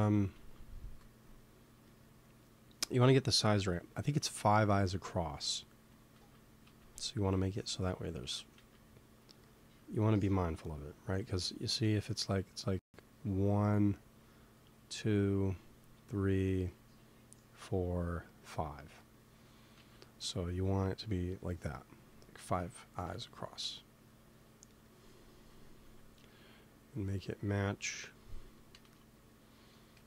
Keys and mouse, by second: 0.0-0.7 typing, 4.0 z, 4.5 z, 4.8 g, 6.1 z, 6.5 z, 7.4 g, 8.5 z, 9.5 z, 19.7 z, 20.2 z, 21.5 KP_3, 22.8 g, 24.8-28.0 middle drag, 25.7 z, 28.6 g, 29.9 KP_1.